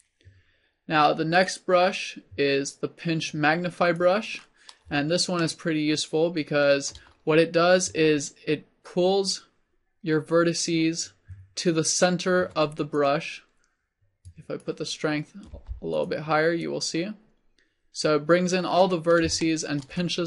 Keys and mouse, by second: 8.5 middle click, 9.4-15.7 drag, 15.7 f, 19.1 middle click.